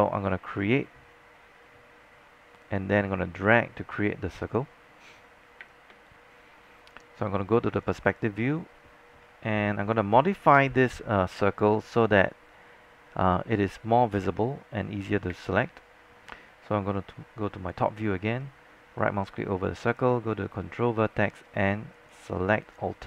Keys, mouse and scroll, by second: 5.7 space, 7.7 scroll up 1, 7.9 click, 8.8-9.2 scroll down 1, 9.2-9.6 scroll up 1, 10.0 alt+click, 11.0 alt+middle click, 15.4 alt+space, 15.5-18.2 drag, 18.2-19.1 scroll up 1, 19.1-20.4 right drag, 20.4-21.3 scroll down 1, 21.3 click, 22.0 shift+click, 22.7 shift+click.